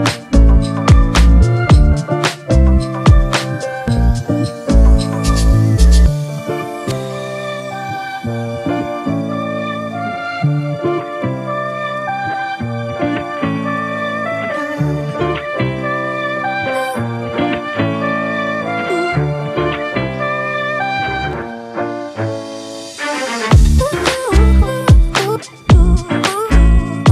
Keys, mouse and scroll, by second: 9.4 double click, 22.8 double click, 25.9 alt+click.